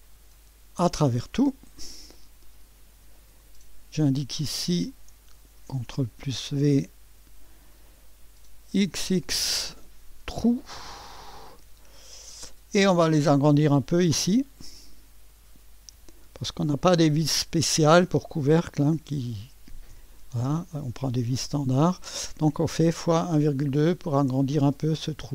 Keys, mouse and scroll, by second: 0.0 click, 0.9 click, 3.4 click, 5.6 ctrl+v, 8.8 typing, 11.1 click, 14.6 KP_Multiply, 15.9 KP_1, 17.6 KP_Decimal, 19.9 2, 23.8 click, 25.2-25.3 scroll up 1.